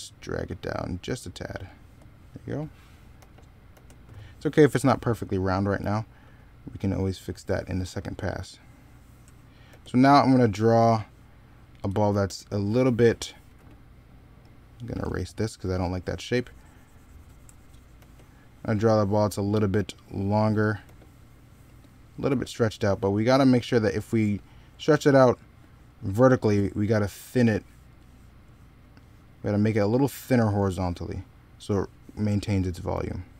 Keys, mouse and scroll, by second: 3.0 e, 3.6 b, 5.6 x, 9.5 ctrl+z, 11.9 e, 17.8 b, 19.6 ctrl+z, 32.8 ctrl+z.